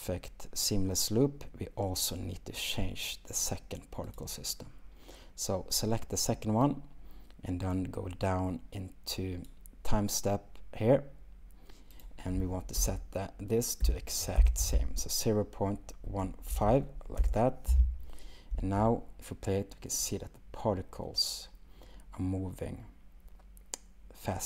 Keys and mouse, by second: 4.1 click, 12.1-17.3 drag, 18.5 space.